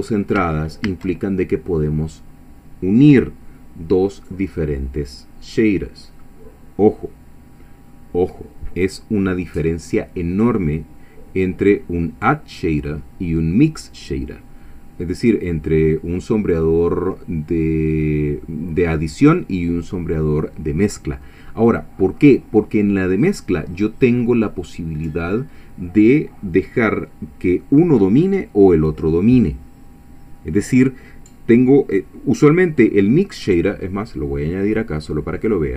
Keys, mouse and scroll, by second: 0.9 shift+a.